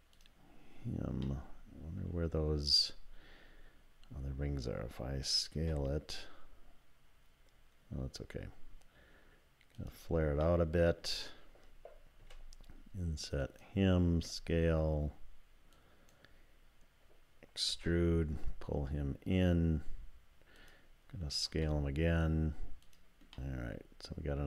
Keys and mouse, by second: 0.2 click, 1.2 click, 5.5 s, 10.5 click, 12.2 i, 14.1 s, 17.7 e, 21.5 s, 23.4-24.4 drag.